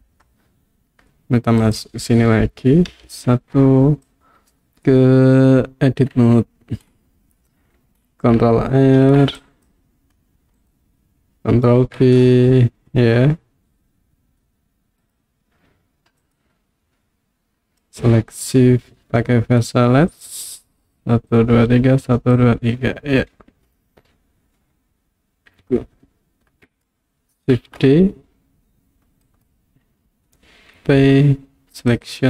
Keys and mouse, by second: 1.6 click, 3.0 KP_1, 4.1 click, 6.2 Tab, 9.0 ctrl+r, 10.6 right click, 11.8 ctrl+b, 15.1 click, 16.3 click, 17.8 click, 20.8 click, 27.7 shift+d, 29.3 right click, 31.0 p.